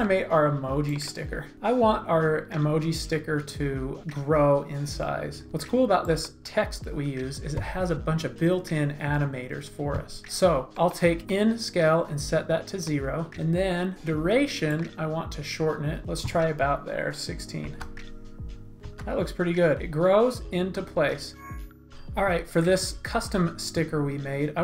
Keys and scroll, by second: 17.6 space, 18.8 space.